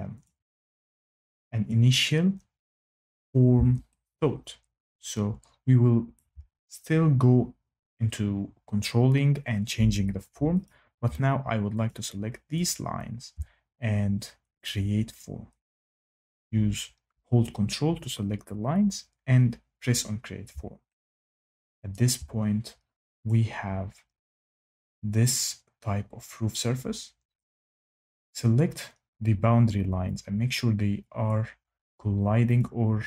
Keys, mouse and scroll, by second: 0.2 click, 1.6 click, 6.1 shift+right click, 10.6 click, 11.8 ctrl+click, 12.6 ctrl+click, 15.1 click, 18.6 click, 21.9 shift+middle click, 23.2 click, 27.4 click, 31.2 click, 32.5 click.